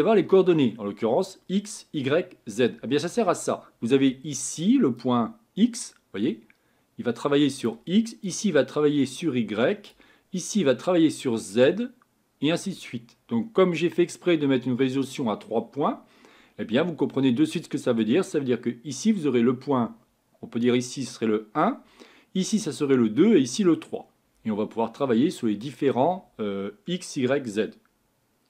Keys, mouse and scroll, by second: 5.4-28.4 drag.